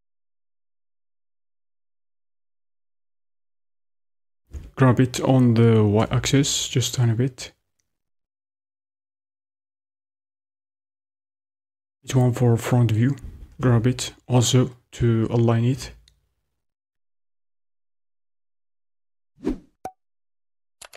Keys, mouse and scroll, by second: 4.8 g, 12.0 KP_1, 13.5 g.